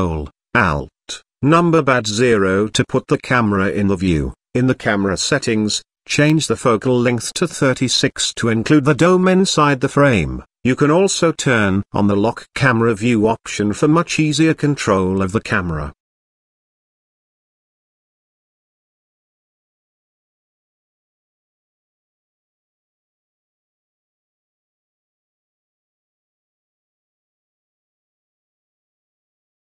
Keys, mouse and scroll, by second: 0.7 ctrl+alt+KP_0, 2.7 click, 3.7-5.1 drag, 11.2 click, 12.2 click, 13.7 click, 15.2-18.2 drag, 19.7 click, 20.1 click, 20.3 click, 20.5 click, 20.6 click, 20.8 click, 20.9 click, 22.0-24.9 drag, 26.6-27.7 drag, 28.1 click.